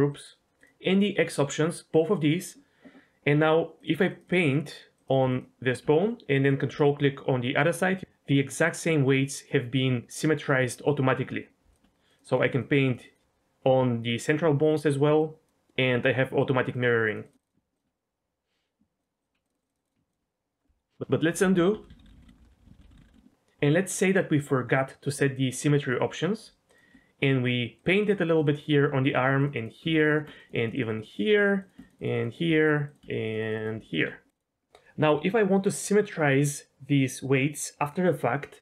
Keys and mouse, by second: 0.1 click, 3.8 click, 3.9 click, 4.3 click, 4.9 click, 5.1 click, 5.3 click, 6.4 ctrl+click, 11.7 ctrl+click, 12.1 click, 12.3 click, 12.6 click, 13.0 click, 14.7 ctrl+click, 15.2-16.5 drag, 16.7 ctrl+click, 17.0 click, 17.7 ctrl+click, 19.0 ctrl+click, 19.4 click, 19.9 click, 20.1 ctrl+click, 21.4 ctrl+z, 21.6 ctrl+z, 21.7 ctrl+z, 21.9-23.2 ctrl+z, 26.7 ctrl+click, 27.7 click, 27.9 click, 28.1 click, 28.3 click, 28.4 click, 29.1 ctrl+click, 29.4 click, 29.5 click, 30.1 ctrl+click, 30.4 click, 30.7 click, 30.9 click, 31.6 ctrl+click, 31.8 click, 32.0 click, 32.1 click, 32.3 click, 32.9 ctrl+click, 33.2 click, 33.4 click, 33.6 click, 33.9 ctrl+click, 34.3 click.